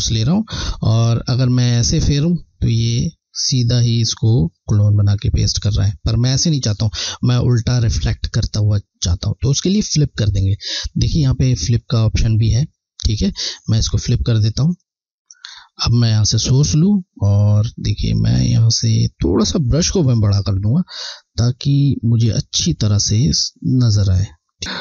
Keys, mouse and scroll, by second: 0.9 click, 1.4 click, 10.7 click, 16.5 alt+click, 18.6 scroll, 23.2 ], 24.6 typing, 24.6 alt+Left.